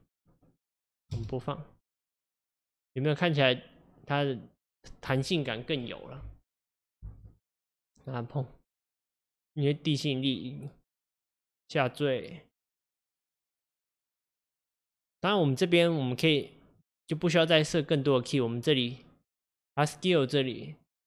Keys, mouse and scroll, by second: 1.2 space, 7.1 space, 7.7-10.8 drag.